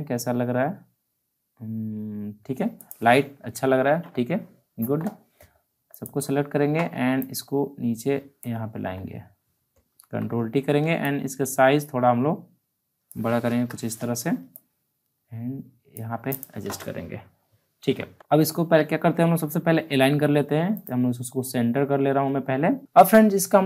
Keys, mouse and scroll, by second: 2.7 click, 2.7 click, 3.7 alt+scroll down 1, 5.9-8.9 shift+drag, 8.6 alt+scroll down 1, 9.9 ctrl+t, 11.0-13.4 drag, 13.4 Return, 14.5 click, 14.5-16.3 drag, 16.8 alt+scroll down 1, 17.3-17.7 alt+scroll up 1, 18.1 ctrl+z, 20.7 click.